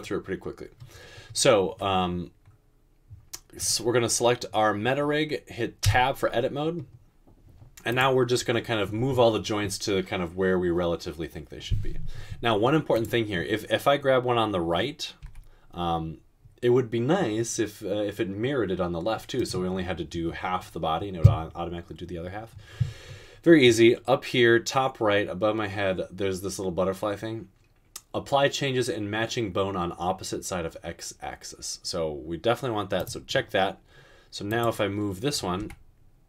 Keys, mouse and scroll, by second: 5.9 Tab, 15.4 g, 35.7 g.